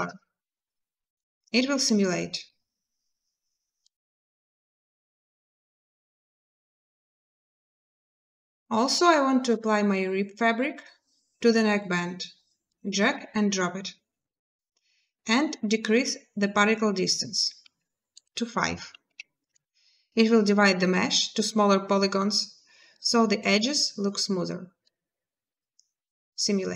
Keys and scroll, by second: 6.1 space, 18.9 5, 19.2 Return, 23.2 space.